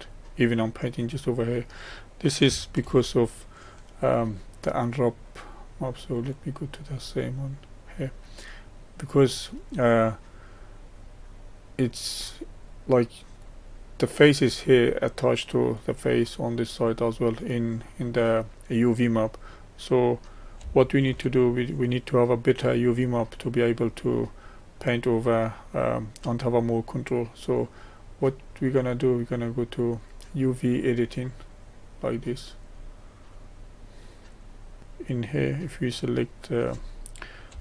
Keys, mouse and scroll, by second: 2.9 ctrl+z, 6.5-8.8 drag, 8.8-13.4 middle drag, 13.4-21.1 drag, 21.1 ctrl+z, 23.6-31.5 middle drag, 31.5 click, 34.8-36.3 drag.